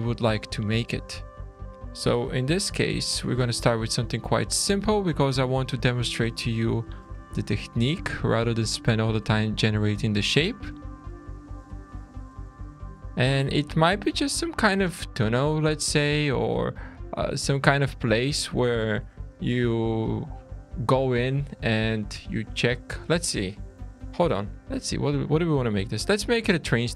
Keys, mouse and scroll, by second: 0.1 alt+a, 0.7 3, 1.5 click, 2.4 3, 2.5 click, 3.3 click, 4.5-4.8 scroll down 3, 4.9 shift+middle click, 5.9 click, 6.5 2, 7.0 click, 7.9 click, 8.9-9.2 scroll down 2, 9.2 middle click, 9.9 shift+middle click, 10.9-12.0 scroll up 3, 12.0 1, 12.7 click, 13.2-13.5 scroll down 3, 13.5 shift+middle click, 15.2 middle click, 16.1 shift+middle click, 16.9 alt+a, 17.1 2, 17.5 click, 18.1 shift+click, 19.1 e, 20.7 middle click, 21.9 click.